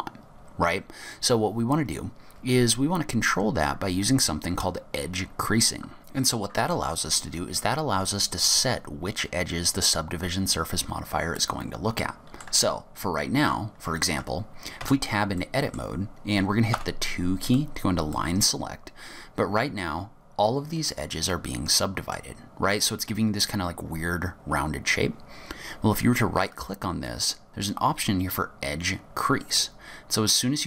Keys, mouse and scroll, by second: 0.2-1.4 scroll up 3, 6.0 middle click, 11.5 middle click, 14.9 Tab, 15.5 middle click, 16.8 2, 17.5 click, 18.2 middle click, 26.6 right click.